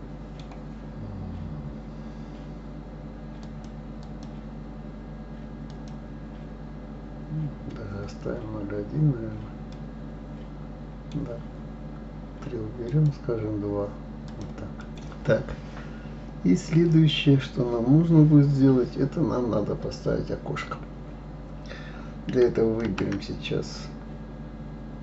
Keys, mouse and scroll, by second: 3.4-7.8 drag, 8.3-8.8 scroll up 3, 9.7-12.7 middle drag, 12.9-13.8 drag, 14.3 click, 14.8 middle click, 15.0-15.7 scroll down 3, 15.7-18.1 scroll down 1, 22.8 shift+a.